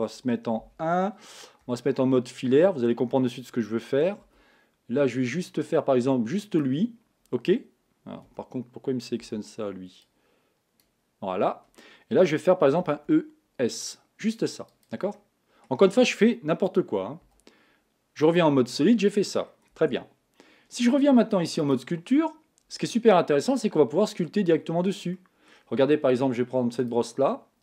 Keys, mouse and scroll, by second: 0.6 KP_1, 2.4 z, 6.6 b, 8.3 a, 10.8 b, 12.8 e, 15.1-18.3 middle drag, 18.3 z, 18.8-19.9 middle drag, 19.9 Tab, 22.4 click, 23.0-26.8 middle drag, 26.8-27.6 drag.